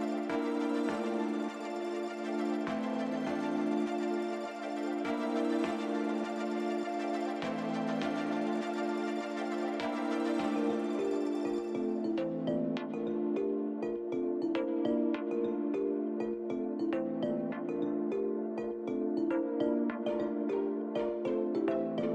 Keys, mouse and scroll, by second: 2.1 click, 4.4 click, 6.1 click, 9.2 click, 11.8 click, 12.7 click, 15.9 click, 15.9 click.